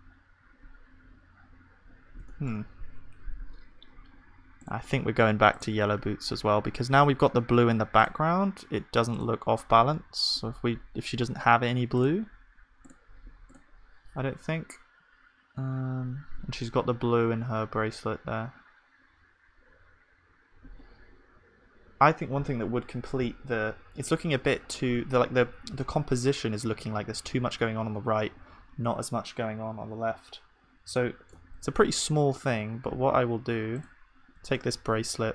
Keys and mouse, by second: 25.0 ctrl+s, 31.6 shift+a, 34.4 click, 34.4 shift+d.